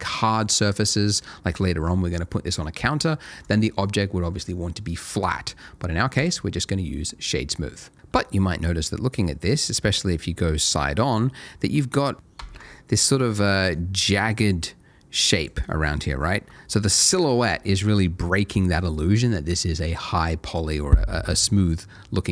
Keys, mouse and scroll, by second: 2.5 right click, 3.4 click, 5.2 right click, 6.2 click, 8.5 middle click, 12.8 ctrl+shift+a, 13.7 shift+click, 14.6 shift+a, 15.5 ctrl+shift+a, 15.6 shift+click, 19.0 ctrl+shift+a.